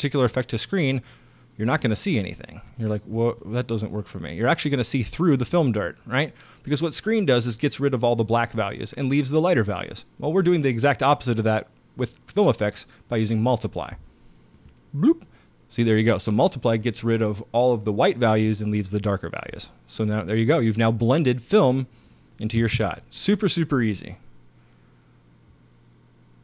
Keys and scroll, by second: 22.6 space.